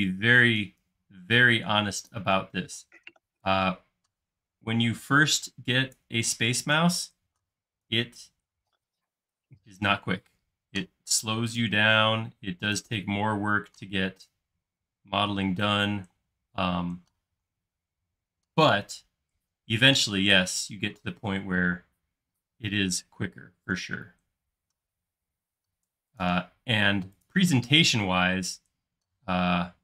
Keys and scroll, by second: 2.6 p, 8.0 super+z, 16.2 space, 29.2 m.